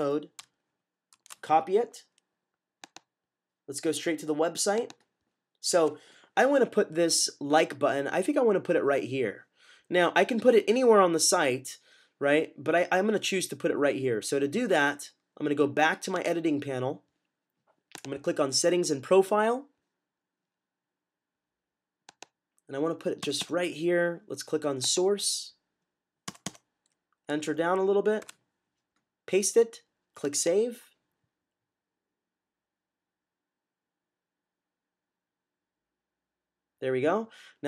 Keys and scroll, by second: 1.0 c, 28.1 v.